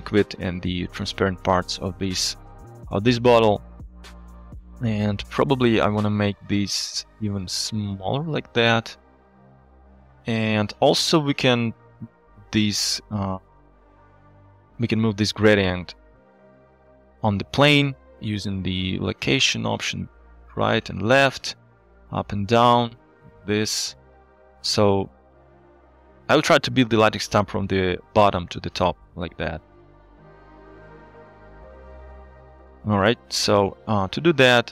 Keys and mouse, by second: 3.7 shift+middle click, 5.1 shift+middle click, 6.1-10.3 shift+drag, 10.7 click, 12.9 middle click, 13.7 z, 14.4 shift+middle click, 16.8 shift+click, 18.2-21.6 shift+drag, 21.8-26.6 shift+drag, 30.2-31.2 drag, 32.0 click, 32.3 click, 33.2 ctrl+z, 33.4 ctrl+z, 33.8 ctrl+z.